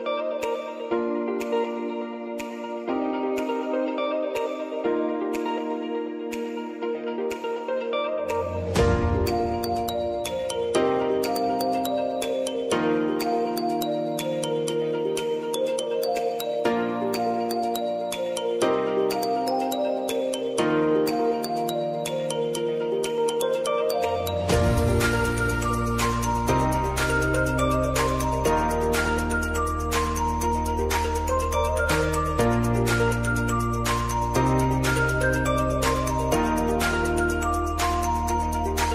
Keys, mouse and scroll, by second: 1.5 right click, 2.7 click, 7.3-8.7 typing, 11.9 r, 13.0-23.6 drag, 24.4-30.7 drag, 31.9-35.2 drag, 35.2 ctrl+alt+Home, 37.3 click.